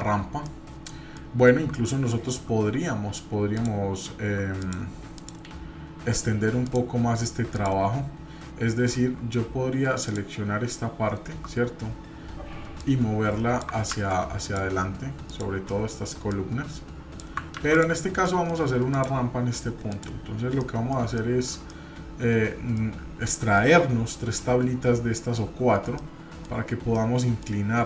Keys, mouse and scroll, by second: 0.5-1.2 middle drag, 3.6-4.3 shift+drag, 4.6 click, 5.2 click, 6.7 click, 7.5 click, 10.1-11.4 shift+drag, 12.8 click, 13.9 ctrl+z, 14.4 click, 15.3 click, 16.3 click, 17.6 ctrl+z, 17.7 click, 18.2 middle click, 18.9 click, 19.4-19.9 scroll up 2, 19.9 click, 20.6 middle click, 21.0 shift+middle click, 21.7-22.8 middle drag, 23.0 scroll up 1, 23.3 shift+middle click, 23.7-24.8 scroll up 1, 25.9 middle click, 26.9 middle click.